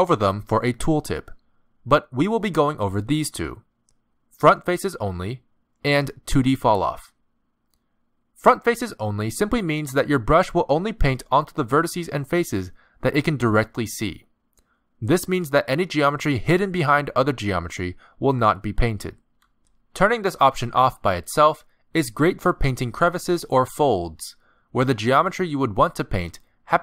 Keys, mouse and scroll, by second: 16.7 middle click, 19.0 middle click, 21.9 click, 25.3 middle click.